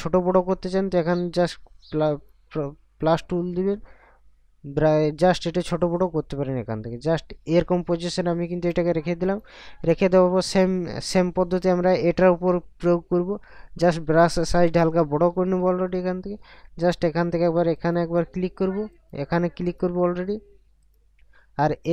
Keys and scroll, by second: 15.3 ].